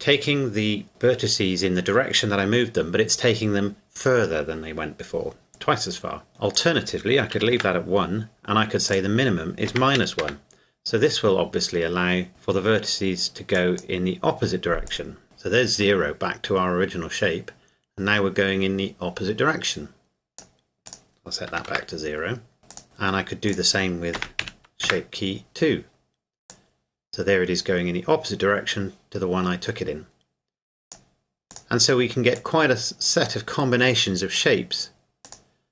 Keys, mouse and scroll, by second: 6.1 scroll down 1, 6.3 scroll up 1, 6.5 click, 7.3 KP_1, 7.5 KP_Enter, 8.9 click, 9.6 KP_Subtract, 10.0 KP_1, 10.2 KP_Enter, 13.5 click, 21.5 KP_0, 21.7 KP_Enter, 22.7 click, 24.2 KP_Subtract, 24.4 KP_1, 24.8 KP_Enter, 26.6 click.